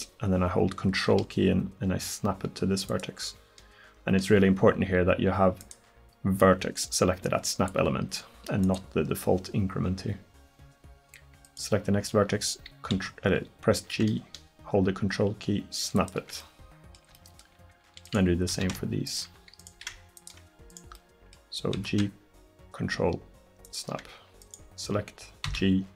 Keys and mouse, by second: 5.7-7.6 drag, 8.7-13.5 drag, 13.0 g, 18.1 right click, 18.6 g, 19.8 g, 21.8 g, 25.5 g.